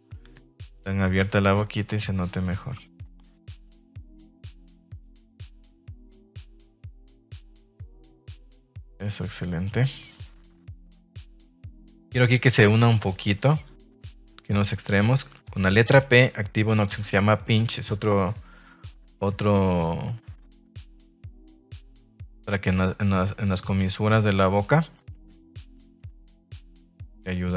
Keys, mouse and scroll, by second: 1.0 click, 3.0 click, 4.0 click, 4.6 click, 5.7-7.9 middle drag, 8.1 middle click, 8.7 middle click, 9.3 middle click, 11.6 middle click, 12.3 middle click, 14.2 click, 19.4 click, 21.6 middle click, 24.4 middle click, 24.9 click, 26.1 ctrl+z, 26.7 ctrl+z, 27.2 Tab, 27.4 middle click.